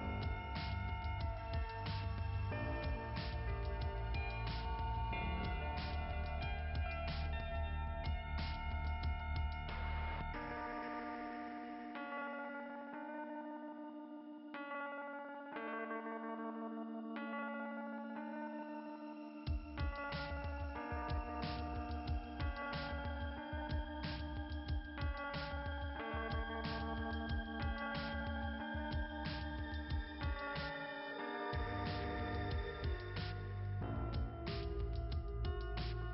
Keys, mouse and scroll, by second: 3.2 click, 4.4 click, 4.5 click, 6.7-7.0 scroll down 2.